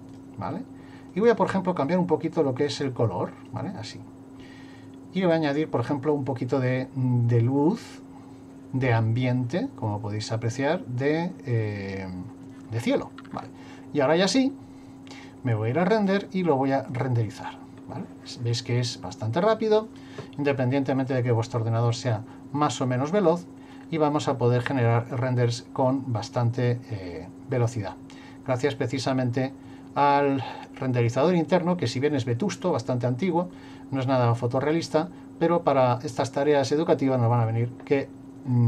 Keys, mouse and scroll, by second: 1.2 click, 5.4 click, 16.0 click, 23.7-24.1 scroll up 2, 24.1 scroll down 1, 24.7 scroll down 1.